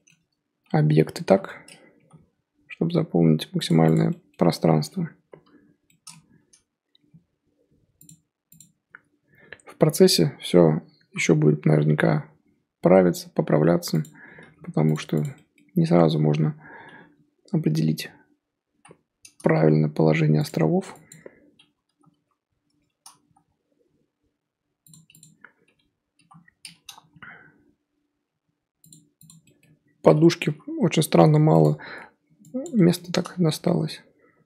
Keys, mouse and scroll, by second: 0.9 l, 1.2 l, 2.0 g, 3.9 click, 5.2 l, 5.4 l, 7.0 g, 8.5 click, 9.8-11.1 l, 11.8 g, 14.3 g, 15.2 click, 17.5-18.7 l, 19.5 g, 21.1 click, 21.8 l, 22.1 l, 23.2 g, 25.2 click, 26.1 l, 27.0 g, 29.2 click, 30.4 l, 30.9 l, 31.6 click, 32.6 click, 32.7-33.6 middle drag, 33.6 g.